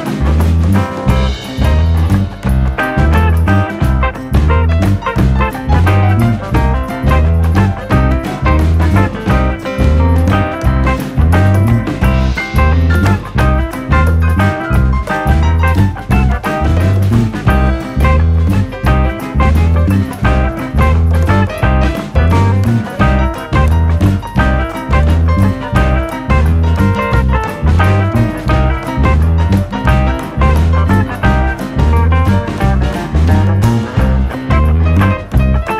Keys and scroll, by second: 31.1 Escape.